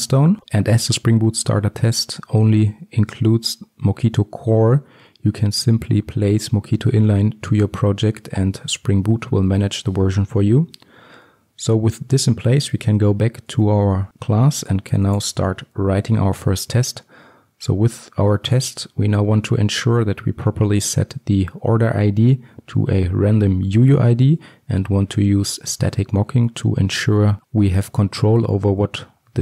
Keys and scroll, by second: 11.3 ctrl+alt+Left, 15.0 ctrl+alt+Left, 15.7 ctrl+shift+t.